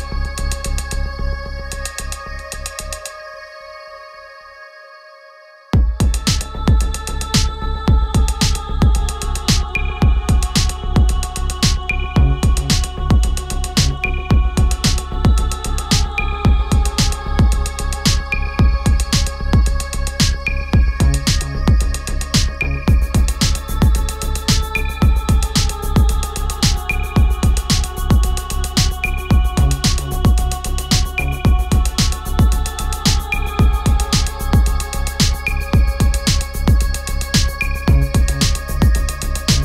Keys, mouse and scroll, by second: 1.9 scroll down 1, 3.4 click, 4.5 ctrl+t, 6.4 ctrl+t, 6.6-9.8 alt+drag, 11.9 ctrl+z, 12.5 click, 14.3 click, 17.3-20.7 drag, 20.7-23.3 drag, 26.0 click, 27.0 ctrl+t, 28.0-29.3 drag, 29.3 ctrl+z, 31.2-33.8 alt+drag, 33.8 Return, 34.6 click, 35.1 Down, 36.7 click, 37.8 shift+click.